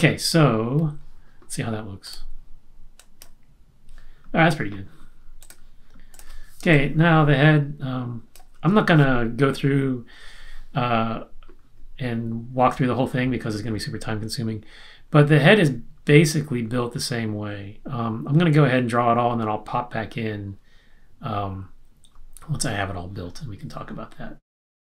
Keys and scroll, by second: 6.6 space.